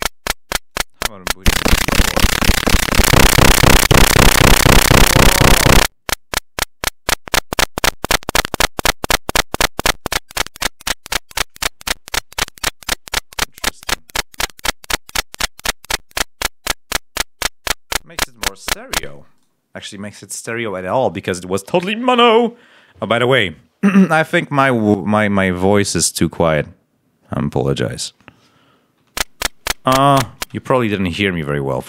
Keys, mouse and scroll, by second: 0.6 click, 2.8 click, 3.8 click, 13.4-14.5 drag, 15.9-17.5 drag, 18.1 click, 18.9 space, 19.3-25.8 right drag, 28.9 l.